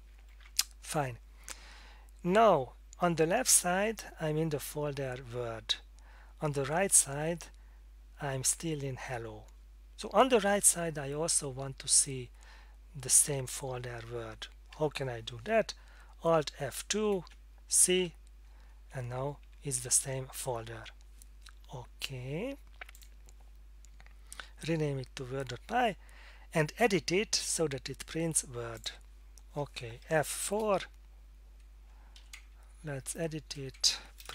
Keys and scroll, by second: 16.9 alt+F2, 18.0 c, 18.9 Tab, 19.4 Tab, 19.8 Tab, 30.5 F4, 32.2 End, 32.3 Left, 32.8 Left, 32.9 Left, 33.3 Left, 33.5-34.3 typing.